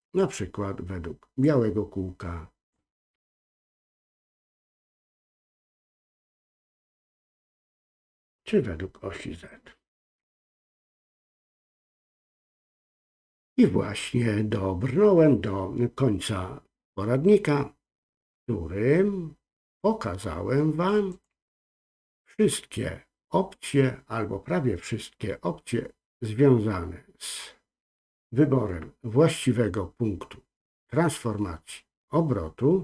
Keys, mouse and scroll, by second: 1.4-2.7 drag, 3.6 ctrl+z, 6.5-8.1 drag, 10.5 ctrl+z, 21.1-29.9 drag.